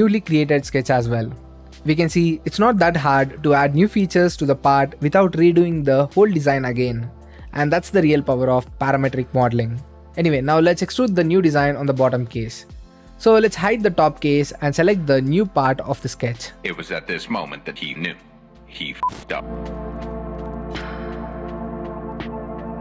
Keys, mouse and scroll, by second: 1.2 middle click, 1.9 right click, 2.6 click, 3.8 right click, 4.3 middle click, 5.1 click, 5.7 middle click, 6.8-7.9 drag, 9.5-11.1 drag, 11.5-13.5 drag, 13.5 right click, 13.6-14.6 drag, 14.9 middle click, 15.7 click, 16.2-18.0 right drag, 19.4 middle click, 19.6-20.9 drag, 21.0-22.8 middle drag.